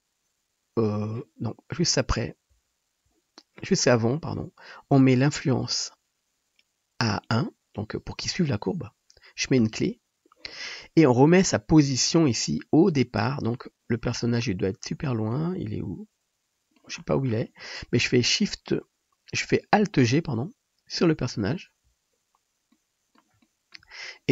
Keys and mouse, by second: 2.6 Left, 3.1 Left, 7.3 middle click, 7.8-24.3 drag, 9.7 i, 11.5-12.6 shift+middle drag, 21.2 alt+g.